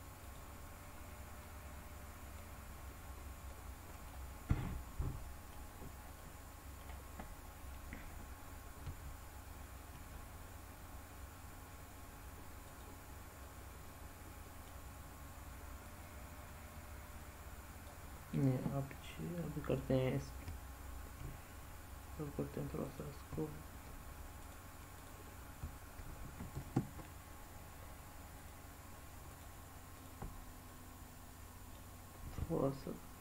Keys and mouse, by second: 0.2 click, 1.3-2.3 middle drag, 3.5 middle click, 4.5-5.5 middle drag, 6.1 middle click, 8.7 g, 12.7 click, 13.3-14.6 middle drag, 15.7-17.8 drag, 20.3 g, 20.9 g, 21.1 g, 22.8 click, 23.2 g, 23.7 g, 24.4 click, 25.5 g, 29.2 shift+click, 29.9 shift+click, 30.6-31.7 middle drag.